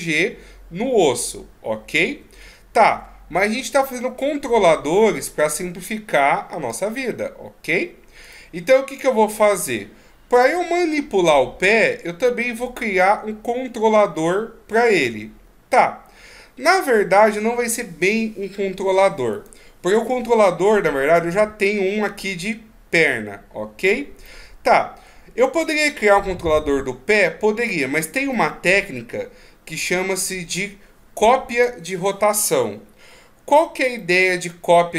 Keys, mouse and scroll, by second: 2.1 ctrl+z, 2.5 ctrl+z, 2.9 ctrl+z, 3.7 middle click, 8.2 right click, 9.6 middle click, 15.0 right click, 19.4 right click, 24.2 middle click, 25.6 right click, 28.3 middle click, 34.0 middle click.